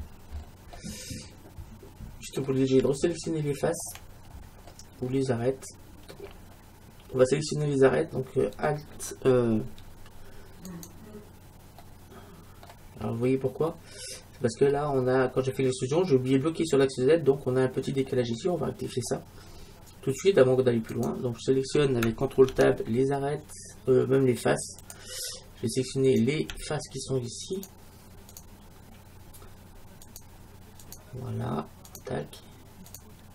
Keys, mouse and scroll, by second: 0.4-0.9 scroll down 1, 5.1-6.3 scroll up 1, 6.3-7.1 scroll up 1, 7.1-8.2 scroll up 1, 8.2 scroll up 1, 8.3-8.9 scroll down 1, 8.9-9.3 scroll down 1, 10.7-12.5 right drag, 11.8-16.2 middle drag, 16.2-17.3 scroll down 1, 18.3-19.5 middle drag, 20.9-22.9 right drag, 22.5 ctrl+Tab, 26.2-33.3 right drag.